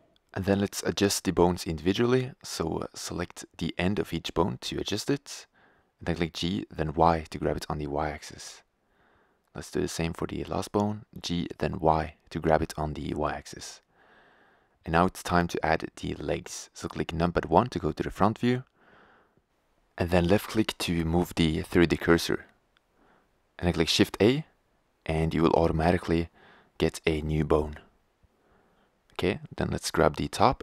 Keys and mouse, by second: 3.4-5.1 drag, 5.1-6.8 right drag, 6.8 g, 6.9 click, 8.8-11.4 drag, 10.6 g, 11.9-14.0 drag, 16.7 KP_1, 22.4-24.1 drag, 27.8 shift+a, 29.3 g.